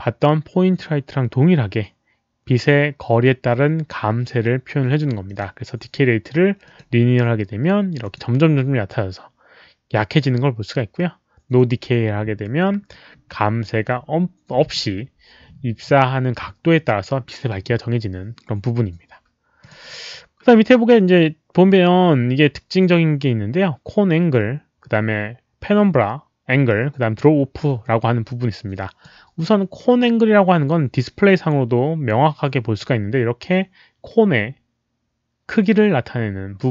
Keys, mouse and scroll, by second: 5.2 click, 6.6 click, 8.0 click, 11.5 click, 19.5 click, 28.2 click, 32.7-36.7 drag.